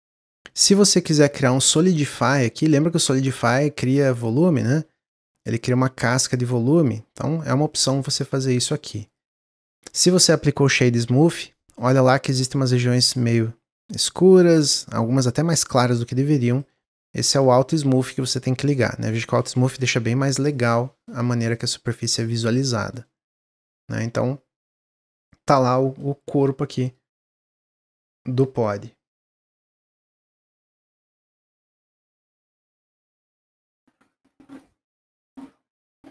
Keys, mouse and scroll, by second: 1.5 click, 2.1 click, 4.3-5.1 drag, 5.5-8.6 shift+drag, 9.7-11.8 middle drag, 11.8 scroll up 2, 16.4 click, 17.4 click, 20.4 click, 20.7 scroll down 2, 21.0-22.6 middle drag, 22.6 scroll down 1, 22.9-26.0 middle drag.